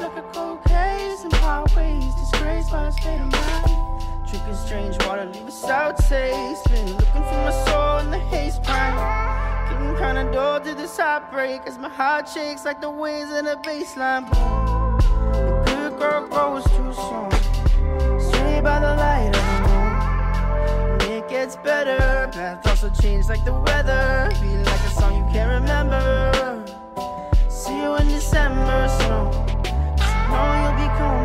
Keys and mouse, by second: 0.2 shift+middle drag, 0.5 middle click, 1.3 middle click, 1.6 shift+middle drag, 2.0 shift+middle click, 3.7 shift+middle click, 4.0 middle drag, 4.7 click, 6.1 middle drag, 6.4 middle click, 6.6 shift+a, 7.4 s, 8.0 s, 8.8 middle click, 9.2 s, 9.8 Tab, 10.0 click, 10.7 e, 11.4 middle click, 11.9 ctrl+b, 14.9 Tab, 15.3 click, 16.0 right click, 16.8 click, 17.0 click, 17.1 middle drag, 17.7 shift+middle click, 17.9-18.3 middle drag, 18.5-19.0 middle drag, 19.2 shift+middle click, 19.3 middle drag, 19.7 shift+a, 21.9 shift+middle drag, 22.7 s, 24.0 shift+middle click, 24.3 middle click, 25.2 s, 26.1 middle drag, 26.4-26.7 middle drag, 26.9 middle click, 27.2 shift+middle click, 27.4 middle click, 28.7 ctrl+alt+KP_0, 29.9 shift+middle drag.